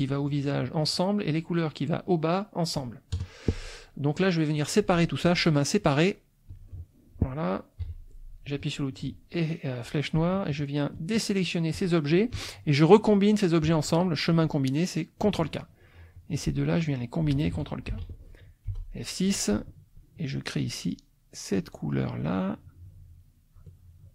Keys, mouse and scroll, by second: 0.9 click, 3.1 KP_Add, 3.7 click, 5.2 click, 6.5 click, 7.8 F1, 10.9 shift+click, 11.7 shift+click, 14.3 click, 15.2 click, 16.1 click, 16.8 shift+click, 17.9 ctrl+k, 18.6 F6, 18.9 click, 20.1-22.3 shift+drag, 22.8 shift+click.